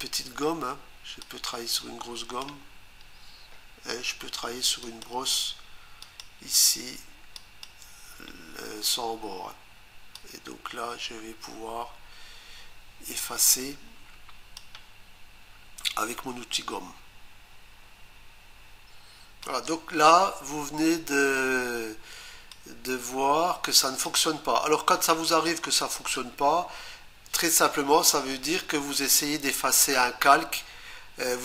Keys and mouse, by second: 1.2 click, 4.8 click, 6.0 click, 7.4 click, 10.2 click, 19.5 click, 24.3 click.